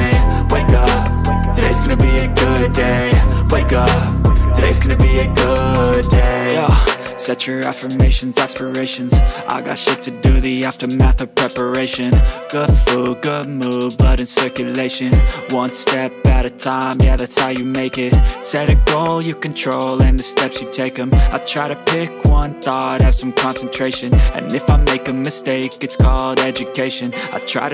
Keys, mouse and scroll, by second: 15.7 double click, 15.8 Return, 17.1 ctrl+space, 17.5 ctrl+click, 17.7 ctrl+space, 20.0 ctrl+space, 20.0 ctrl+click.